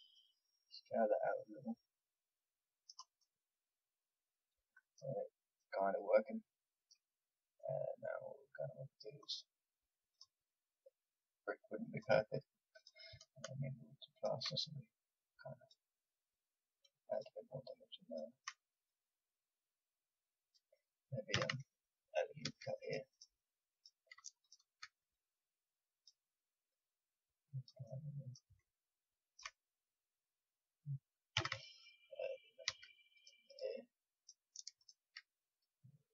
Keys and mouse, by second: 3.1-5.1 middle drag, 9.2-21.3 drag, 21.3 a, 22.4 ctrl+r, 23.6 click, 25.0-28.7 drag, 28.7-31.3 middle drag, 31.3 a, 32.6 ctrl+r, 34.1-36.1 drag.